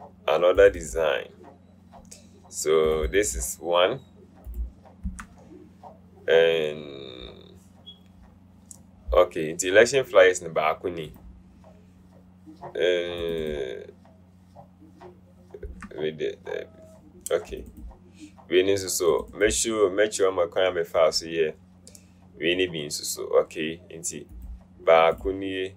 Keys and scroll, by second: 5.3 BackSpace, 15.9 BackSpace.